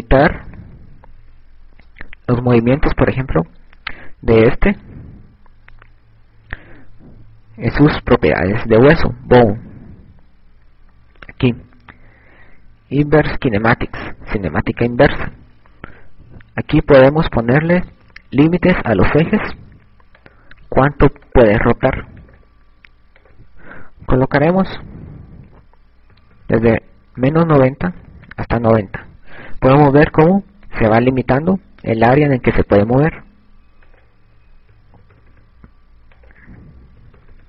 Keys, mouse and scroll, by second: 3.6 right click, 9.7 click, 14.6 click, 16.2 click, 21.3 click, 22.5 click, 24.6 click, 29.2 click, 35.2 click.